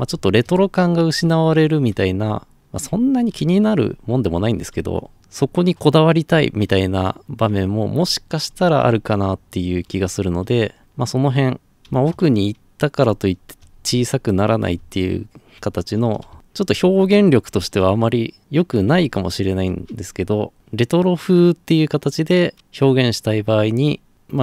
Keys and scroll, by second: 0.0-17.6 typing, 19.1 Escape.